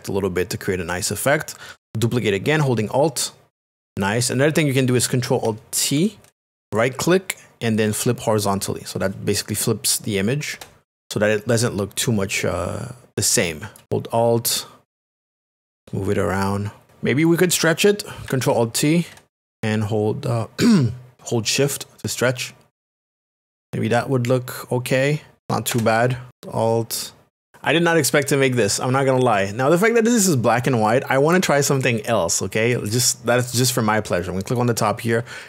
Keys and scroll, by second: 6.6 alt+t, 10.5 Return, 19.5 alt+t, 25.7 Return.